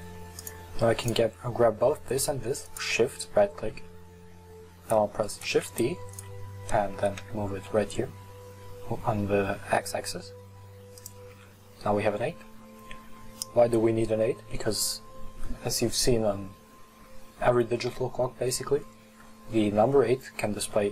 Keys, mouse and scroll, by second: 1.1 right click, 2.7 shift+right click, 5.5 shift+d, 7.0 g, 11.4 Tab, 12.2 Tab, 16.6-19.6 scroll up 1.